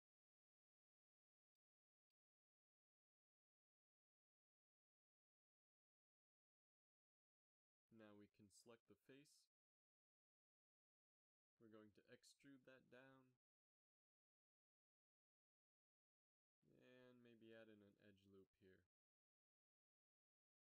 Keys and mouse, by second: 4.6 right click, 5.1 g, 7.5 z, 9.1 ctrl+Tab, 11.2 KP_3, 11.6 z, 13.3 e, 17.0 z, 18.3 ctrl+r.